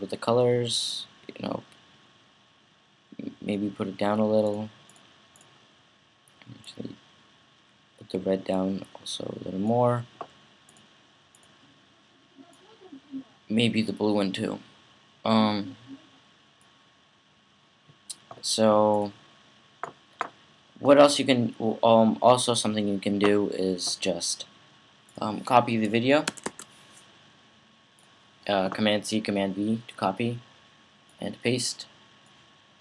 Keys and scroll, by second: 26.1 super+c, 26.2 super+v.